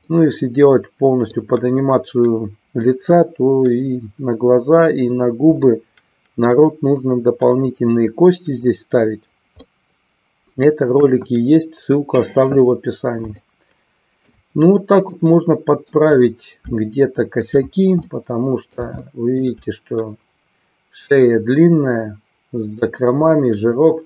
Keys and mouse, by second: 0.0-1.4 middle drag, 5.7-6.7 middle drag, 9.8-10.8 middle drag, 11.0 KP_1, 13.5 shift+middle click, 15.1-16.1 middle drag, 16.8 shift+middle click, 18.1 middle click, 19.1 shift+middle click, 23.3-24.0 middle drag.